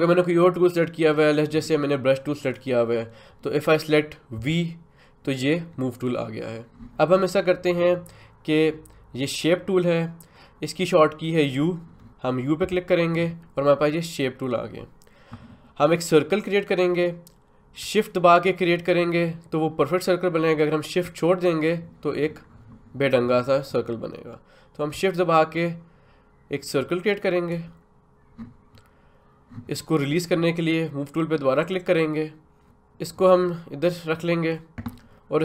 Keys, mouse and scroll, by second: 2.4 click, 4.4 v, 12.6 u, 18.4-28.4 shift+drag, 31.6 click, 33.1-35.4 drag.